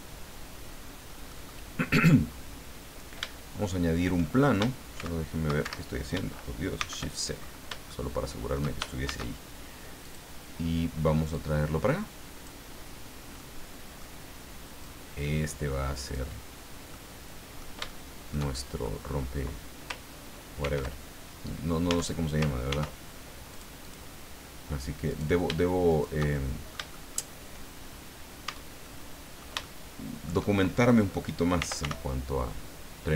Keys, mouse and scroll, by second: 1.3 click, 4.9 shift+x, 5.6 shift+Escape, 6.7 shift+c, 7.3-7.8 shift+scroll up 1, 7.9 shift+middle click, 9.0 shift+a, 10.0 click, 11.3-12.6 drag, 13.3 middle click, 14.8-16.3 drag, 16.9 middle click, 17.9 shift+middle click, 19.1-19.4 shift+scroll up 1, 20.6 ctrl+r, 21.9 Tab, 22.7 ctrl+r, 23.5 click, 25.1 right click, 25.9 shift+right click, 26.3 shift+middle click, 28.4 Tab, 28.8-30.5 middle drag, 31.3-32.3 typing.